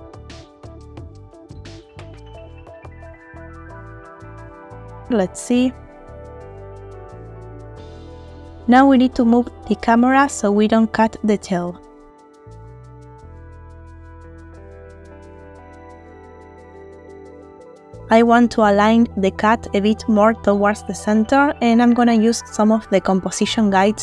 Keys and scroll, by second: 2.8 Tab, 4.6 space, 5.2 ctrl+space, 13.2 space.